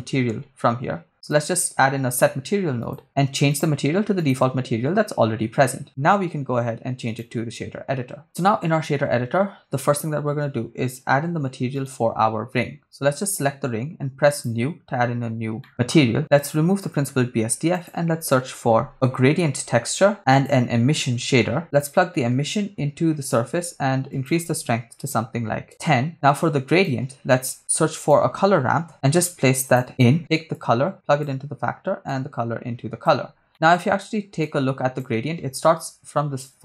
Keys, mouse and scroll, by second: 3.5-4.5 drag, 5.8-7.2 drag, 8.0 scroll down 2, 11.9 right click, 14.3 click, 15.6 middle click, 15.9 click, 16.8 x, 17.2 shift+a, 20.1 shift+a, 22.5-23.5 drag, 24.1-25.7 drag, 26.2 click, 26.4 click, 27.6 scroll up 2, 27.8 shift+a, 30.5-31.3 drag, 32.1-33.3 drag, 33.5 middle click, 34.4 click.